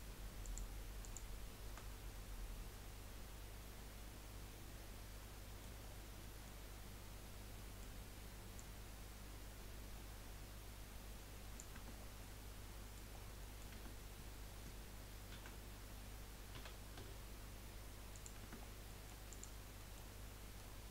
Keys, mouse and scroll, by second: 0.4 shift+click, 1.0 shift+click, 1.9-5.0 middle drag, 5.9 scroll down 5, 6.3 middle click, 6.9-7.5 scroll down 2, 7.5-8.5 middle drag, 8.5 click, 11.9 scroll down 4, 12.2 middle click, 13.1 scroll down 2, 13.7 Tab, 14.0-15.3 scroll up 2, 15.3 a, 16.9 s, 18.4 Tab, 18.6-19.0 scroll down 4, 19.0 middle click, 19.3 click, 19.8 middle click, 20.3 scroll up 1.